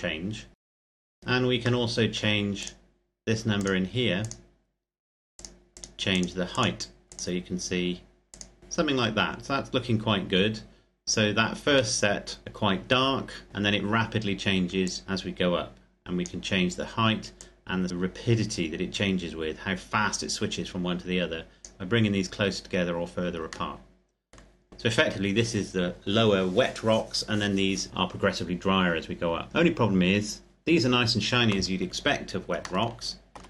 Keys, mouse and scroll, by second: 1.1-1.6 scroll down 1, 1.6 middle click, 2.3 click, 9.2-9.8 scroll up 1, 9.8-11.7 scroll down 1, 11.7 middle click, 12.4-13.5 scroll up 1, 13.5-14.6 scroll down 1, 14.6 click, 23.5 middle click, 29.5-31.6 scroll up 1, 31.6-32.3 scroll down 1, 32.6 shift+middle click.